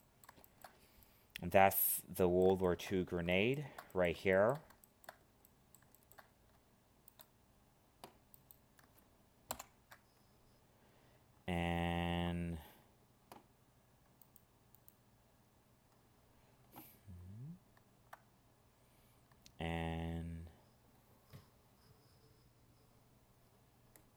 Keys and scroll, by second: 9.5 ctrl+l.